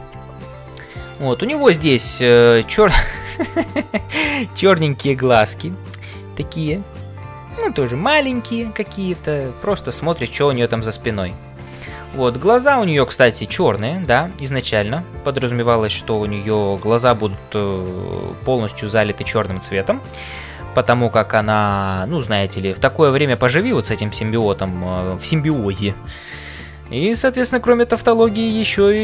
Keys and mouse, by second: 0.7 middle click, 2.5 middle click, 12.6 middle click.